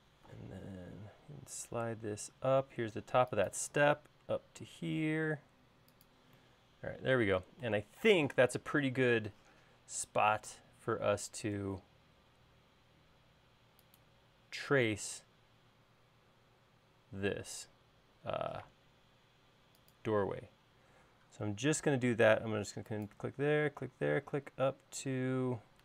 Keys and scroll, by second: 1.3 m, 10.0 l.